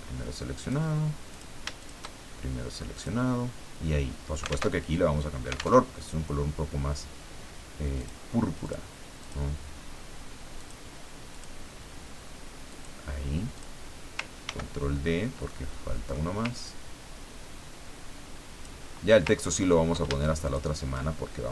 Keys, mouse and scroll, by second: 0.6 click, 1.3 click, 2.9 click, 4.7 alt+Tab, 5.8 alt+Tab, 8.0 click, 8.6 click, 9.2 click, 10.6-12.1 drag, 12.7 click, 13.5 click, 14.4 ctrl+d, 15.0 ctrl+scroll down 2, 15.5 ctrl+middle click, 16.6-19.1 ctrl+drag, 19.5-19.9 ctrl+scroll up 2, 20.5 shift+click.